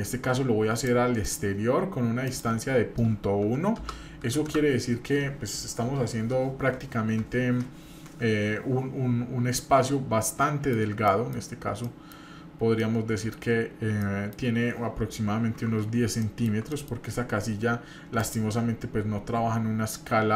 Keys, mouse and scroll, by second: 9.4-10.3 scroll up 1, 10.3-10.8 middle drag, 11.1 middle click, 11.8 middle click, 12.4-12.7 scroll down 2, 12.8-13.3 middle drag, 13.5-14.0 scroll up 1, 14.0 middle click, 16.2 shift+middle click, 16.7 middle click, 18.2-19.7 drag.